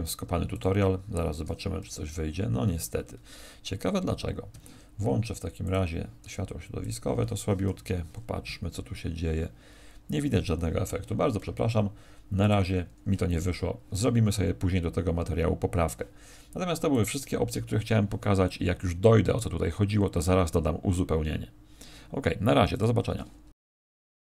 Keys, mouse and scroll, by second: 4.5 Escape, 5.6 click, 6.7 click.